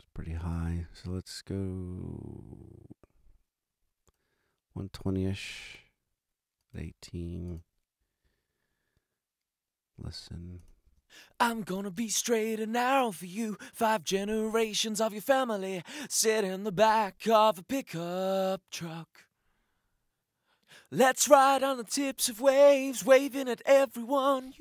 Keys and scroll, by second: 10.8 space.